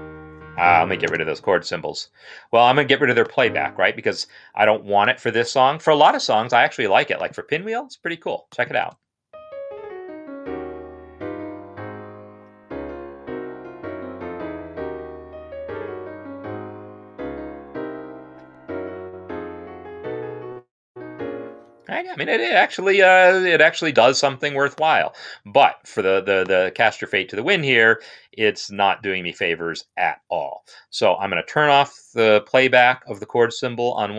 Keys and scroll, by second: 0.9 space, 8.6 space, 22.6 space.